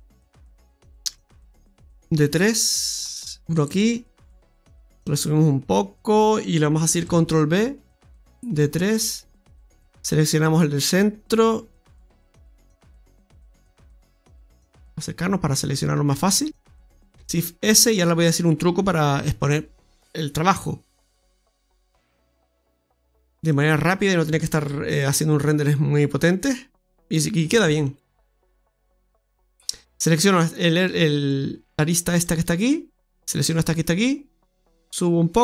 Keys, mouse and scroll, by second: 1.0 ctrl+r, 5.0 click, 6.9 click, 6.9 ctrl+b, 10.6 right click, 11.2 alt+shift+right click, 14.8 scroll up 2, 15.6 right click, 18.0 shift+s, 21.3 s, 24.5 ctrl+r, 27.5 ctrl+r, 30.0 right click, 30.5 alt+shift+right click, 31.0 right click, 31.2 right click, 31.7 right click, 32.0 alt+shift+right click, 34.2 click.